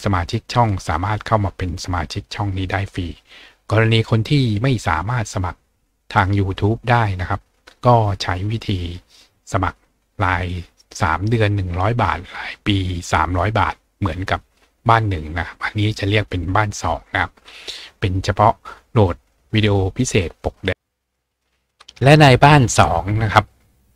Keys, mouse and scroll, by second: 20.7-21.6 scroll down 2, 21.6-22.1 scroll up 2, 22.1-23.9 scroll up 1.